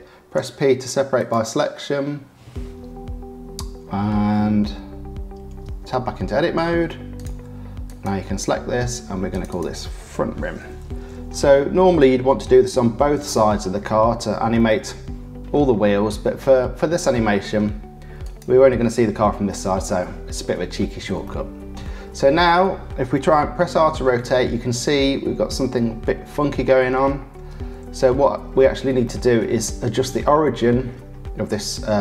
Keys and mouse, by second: 0.3 p, 6.5 Tab, 7.1 click, 9.3 click, 9.5-13.7 drag, 14.5-15.5 drag, 16.1-17.5 drag, 18.2 click, 21.2 shift+middle click, 21.7 shift+click, 23.9 r, 29.0 shift+middle click.